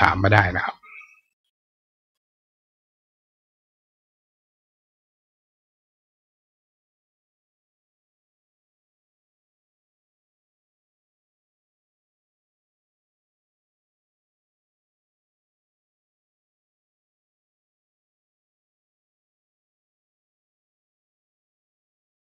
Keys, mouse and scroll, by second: 0.3 right click, 0.7 right click, 1.1 right click, 1.8 right click.